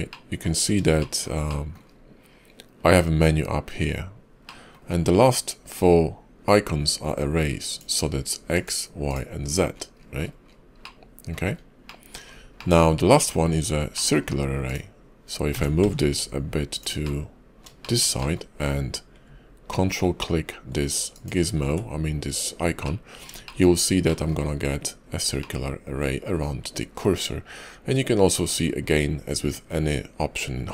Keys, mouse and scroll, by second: 0.0 middle click, 0.6 scroll up 2, 0.9 shift+middle click, 1.3 middle click, 1.8 scroll down 1, 4.3 middle click, 7.5 click, 8.4 click, 8.9 click, 9.3-10.7 scroll down 23, 10.7 middle click, 11.3 scroll up 3, 11.7 middle click, 12.1-12.6 scroll down 3, 12.4 middle click, 13.3 scroll down 2, 13.8 middle click, 14.5 click, 15.4 g, 16.9 middle click, 17.7 shift+middle click, 18.0 middle click, 21.0 ctrl+click, 22.7 middle click, 23.3 shift+middle click, 23.6 scroll up 3, 23.9 middle click, 24.3 scroll down 3, 25.3 middle click.